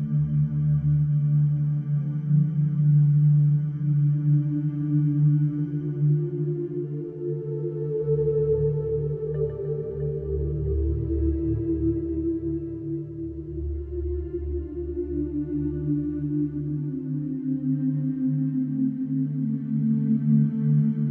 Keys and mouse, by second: 0.3-0.6 ctrl+alt+drag, 2.1 ctrl+alt+click, 4.4 ctrl+alt+click, 5.0 ctrl+alt+click, 5.6 alt+click, 6.8 alt+click, 8.1 alt+click, 10.6 click, 15.5 ctrl+alt+click, 20.1 click, 20.9 click.